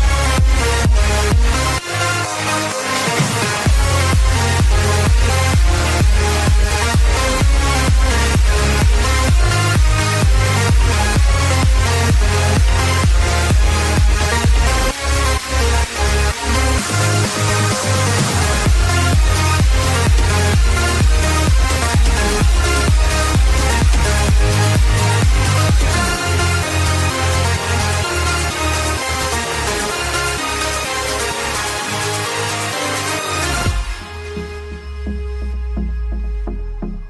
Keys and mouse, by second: 1.4 click, 5.4 click, 9.7 click, 11.8 click, 13.9 click, 15.7 click, 17.6 click, 19.1 click, 19.1 KP_5, 19.3 KP_0, 21.1 Return, 21.1 KP_0, 23.3 click, 25.4 click, 29.7 click, 32.3 click, 33.0 click, 33.9 click, 35.0 click.